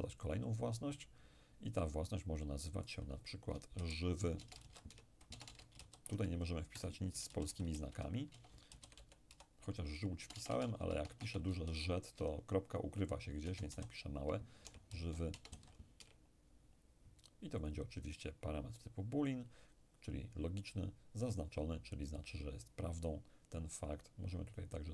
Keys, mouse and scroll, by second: 0.2 click, 2.9 click, 3.8-5.8 typing, 7.3-10.6 typing, 11.7 z, 13.5 BackSpace, 13.8 alt+z, 14.7 alt+y, 15.0 alt+l, 15.4 BackSpace, 15.6 alt+w, 16.0 alt+y, 17.7 click, 21.3 click, 24.6 click.